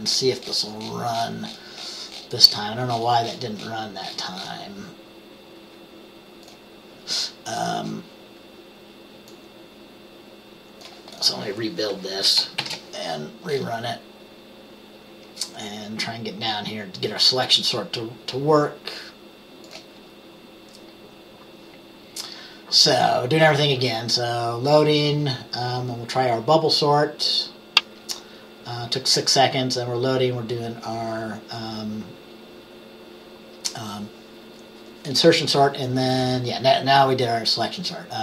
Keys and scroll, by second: 12.7 ctrl+b.